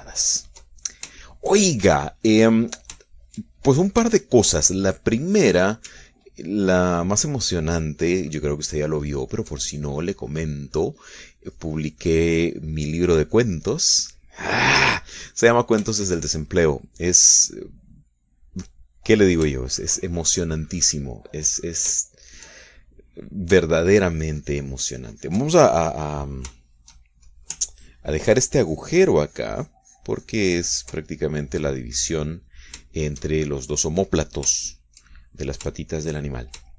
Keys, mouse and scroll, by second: 1.9 ctrl+middle click, 2.3 ctrl+shift+middle click, 3.1 shift+middle click, 4.2-6.9 shift+middle drag, 7.3-9.4 ctrl+drag, 9.8 ctrl+click, 10.8-15.1 ctrl+drag, 15.3 middle click, 16.3 middle click, 17.0-18.0 shift+middle drag, 18.4-21.2 middle drag, 21.8-23.1 middle drag, 23.2-24.4 shift+middle drag, 24.9-27.4 ctrl+drag, 27.4-28.5 shift+middle drag, 28.8-32.5 ctrl+drag, 32.5-34.8 middle drag, 35.7 shift+middle click.